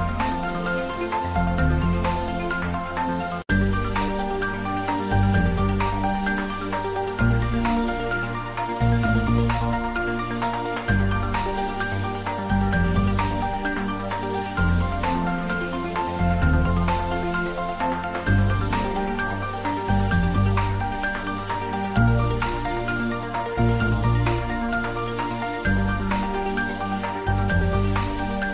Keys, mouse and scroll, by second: 0.1 g, 0.4 x, 0.6 Right, 1.8 Return, 3.5 s, 8.2 click, 8.3 s, 10.5 click, 11.1 g, 11.4 Up, 12.5 Return, 12.9 ctrl+s, 15.6 s, 20.0 click, 20.9 s, 21.7 click, 21.9-23.6 ctrl+middle drag, 23.6 ctrl+s, 25.5 ctrl+middle click, 25.8 shift+middle click, 26.1 click, 26.3 middle click, 27.3 ctrl+middle click, 27.9 click, 28.3 shift+z.